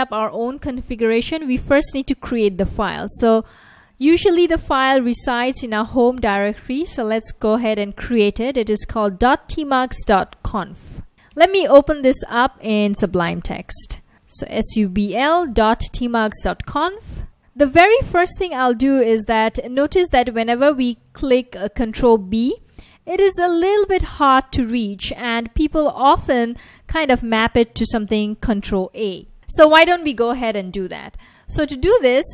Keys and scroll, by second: 2.8-14.6 typing, 16.8 Return, 21.9 ctrl+b, 22.6 ctrl+b, 23.6 ctrl+b, 24.9 ctrl+b, 25.9 ctrl+b, 26.0 ctrl+b, 27.0 ctrl+b, 28.8 ctrl+a, 29.4 ctrl+a.